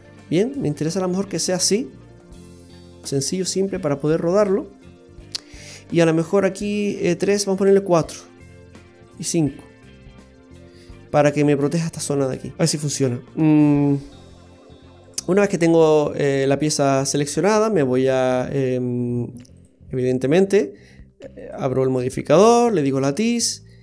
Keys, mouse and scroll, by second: 0.5 middle click, 7.5 click, 9.1 click, 12.5 middle click, 12.5-12.9 scroll down 3, 15.1 right click, 17.1 click, 19.5 click, 21.4 click.